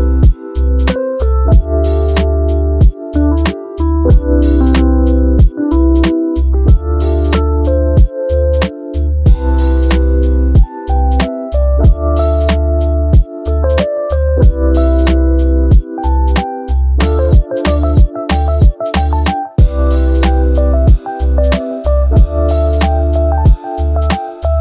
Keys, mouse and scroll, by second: 2.4 middle click, 3.1-4.3 middle drag, 5.7 click, 7.6-8.2 middle drag, 8.8-9.6 middle drag, 9.6 shift+middle click, 12.0 click, 16.0 drag, 17.1-17.8 drag, 19.0-20.2 drag, 21.0 ctrl+c, 22.2-22.5 drag, 22.6-23.8 drag, 24.5 click.